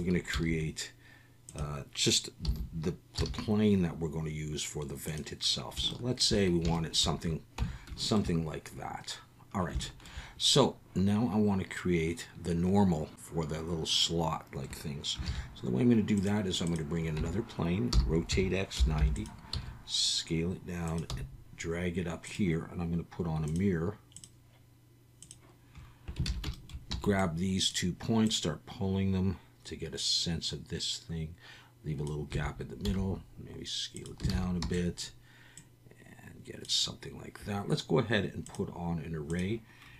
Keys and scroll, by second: 0.0-0.3 typing, 2.4 s, 3.2 x, 7.6 Tab, 15.2 shift+a, 17.2 Tab, 17.9-19.5 typing, 21.1 g, 26.3 alt+a, 26.9 b, 32.3 a, 32.8 s, 34.3 alt+a, 34.6 b.